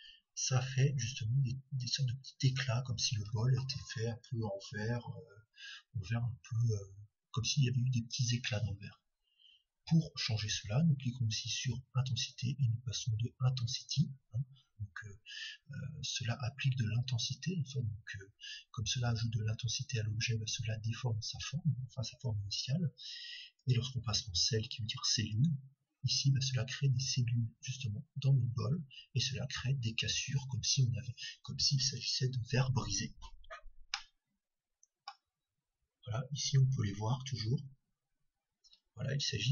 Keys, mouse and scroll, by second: 12.1-14.1 drag, 24.8-26.8 drag, 33.9-36.8 middle drag.